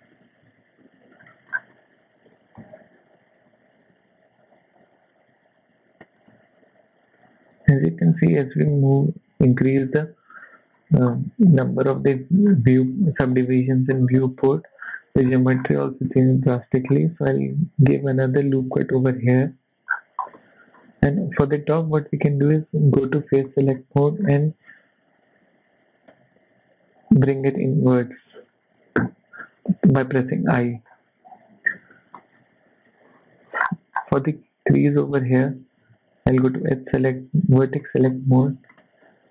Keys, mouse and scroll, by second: 0.5 z, 0.8 middle click, 1.2-1.7 scroll up 5, 1.3 shift+middle click, 2.3 g, 7.2 click, 8.0-9.9 scroll down 4, 9.9-11.2 scroll down 8, 10.5 shift+middle click, 12.2 shift+middle click, 12.5-12.9 scroll up 4, 12.9 middle click, 13.4 shift+middle click, 13.9 scroll up 2, 14.3 KP_1, 14.8 scroll down 2, 15.0 shift+middle click, 15.2-15.7 shift+scroll up 6, 15.8 Tab, 16.4 shift+middle click, 16.6 scroll up 1, 17.3 scroll up 1, 17.4 ctrl+r, 19.9-20.4 scroll down 5, 20.3 middle click, 22.1 click, 22.7 click, 23.4 shift+middle click, 23.7-24.4 shift+scroll up 3, 25.7 i, 29.0-29.4 scroll down 5, 29.4 shift+middle click, 30.5 Tab, 30.9-31.4 scroll down 2, 31.2 KP_1, 31.7 shift+middle click, 32.3 shift+middle click, 32.9 Tab, 33.3 z, 33.6-34.1 scroll up 8, 34.2 shift+middle click, 35.1 click, 36.5 click, 37.0 click, 37.8 shift+middle click, 38.0-38.6 scroll up 4, 38.7 shift+middle click.